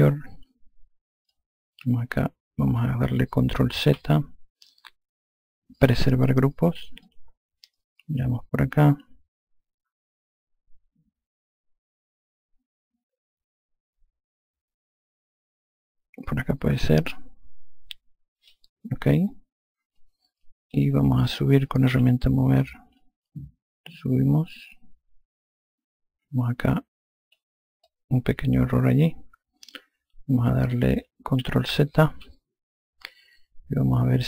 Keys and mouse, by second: 0.0 click, 1.6 click, 4.1 ctrl+z, 6.1 click, 7.3 click, 20.3 alt+click, 22.2 e, 23.3 click, 28.1 alt+click, 32.4 ctrl+z.